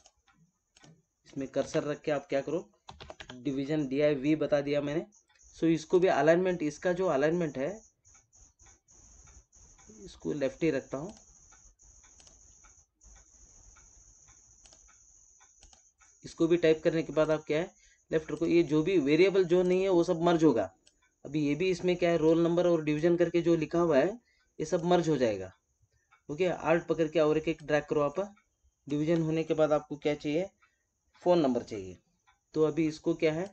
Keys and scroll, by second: 1.5 ctrl+a.